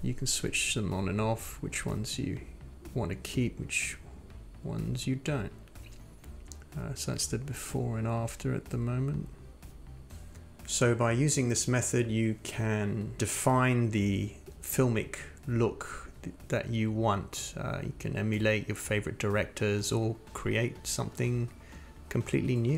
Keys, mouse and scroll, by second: 6.4 click, 7.9 click, 8.6 click, 9.9 click, 15.6 click, 18.8 click, 19.5 click, 20.2 click, 21.6 click.